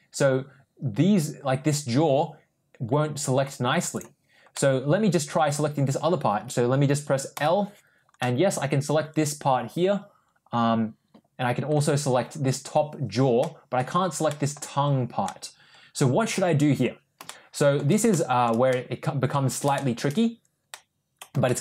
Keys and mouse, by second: 3.8 click, 4.4 middle click, 7.2 l, 8.0-11.5 middle drag, 13.3 middle click, 14.1 middle click, 15.1-16.7 middle drag, 17.1 shift+middle click, 18.0 shift+middle click, 18.6 middle click, 19.6 shift+middle click, 20.6 middle click, 21.3 shift+middle click.